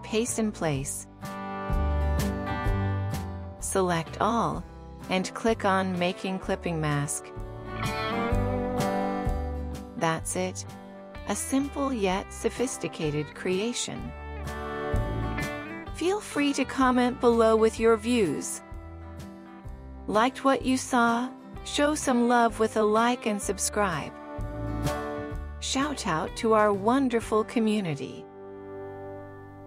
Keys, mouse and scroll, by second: 5.5 right click.